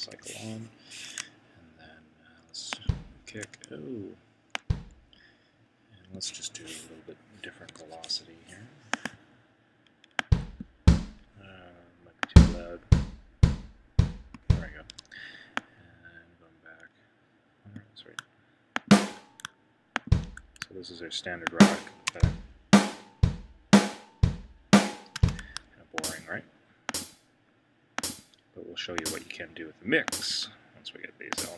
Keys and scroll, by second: 0.0 c, 7.7 Escape, 14.9 Escape.